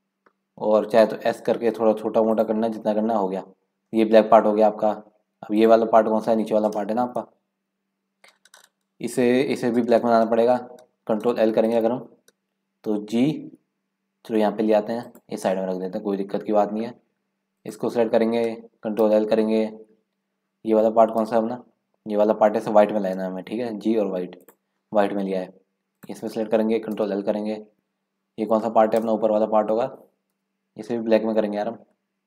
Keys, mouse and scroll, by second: 0.9 s, 2.9 scroll down 4, 3.3 scroll up 4, 3.9-4.3 scroll down 2, 4.9 scroll up 3, 5.6 click, 7.5 KP_Decimal, 11.7 ctrl+l, 13.2 g, 15.8-16.2 scroll down 2, 16.2-17.5 middle drag, 17.5 click, 19.0 ctrl+l, 21.2 KP_Decimal, 23.1 g, 25.5-26.0 scroll down 1, 26.0 click, 27.0 ctrl+l, 29.3 KP_0, 30.3 KP_Decimal.